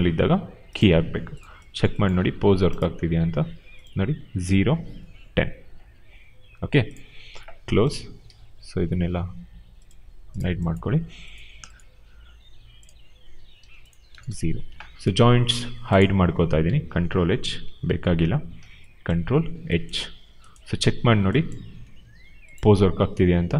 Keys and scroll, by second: 13.9 0, 14.1 Return, 17.9 ctrl+h.